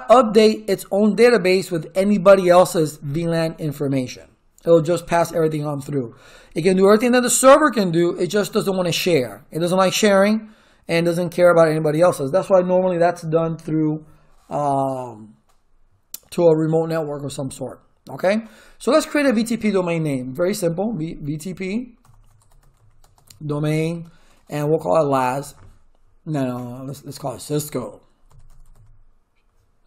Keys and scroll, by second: 21.0-26.3 typing, 27.5-29.2 typing.